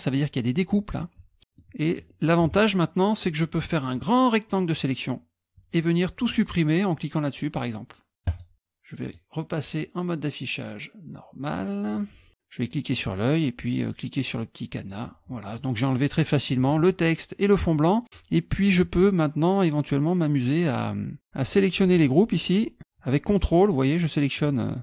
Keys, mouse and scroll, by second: 1.6 middle click, 3.9 click, 8.3 click, 9.0 click, 11.9 click, 13.0 click, 14.8 click, 15.5 click, 15.9 middle click, 17.7 middle click, 18.7 click, 21.4 click, 21.9 shift+click, 23.3 ctrl+click, 23.9 click, 24.4 click.